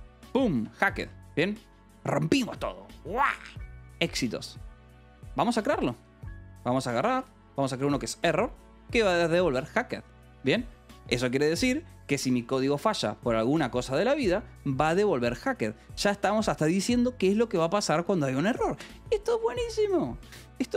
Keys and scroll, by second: 0.6 Escape, 1.4 ctrl+s, 3.0 k, 4.8-8.0 typing, 9.2 ctrl+g, 10.3 s, 12.3-14.0 typing, 16.1 shift+k.